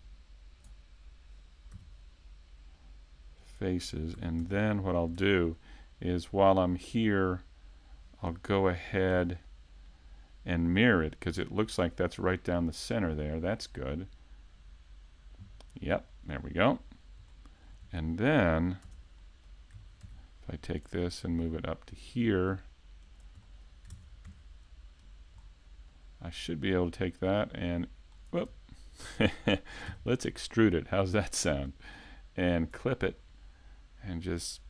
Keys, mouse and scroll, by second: 4.4 Tab, 5.5 middle click, 9.1 shift+c, 9.9 middle click, 11.7 middle click, 13.3 click, 15.7-16.3 scroll down 2, 16.1 middle click, 16.9-17.8 scroll up 3, 17.3 shift+middle click, 18.8 Tab, 19.2 middle click, 20.0 ctrl+r, 23.4 middle click, 23.9 ctrl+Tab, 25.0 right click, 25.4-26.4 scroll down 3, 25.9 middle click, 27.2 click, 29.0 super+e, 31.5 click, 32.5 click, 33.2-34.6 scroll up 1.